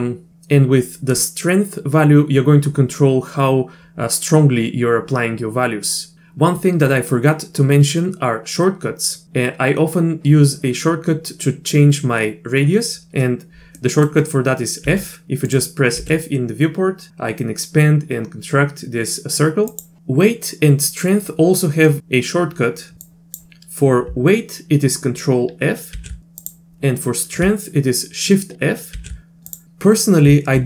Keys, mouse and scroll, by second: 13.8 middle click, 14.8 f, 16.0 f, 21.9 click, 22.9 ctrl+f, 23.1 click, 25.9 ctrl+f, 28.6 shift+f.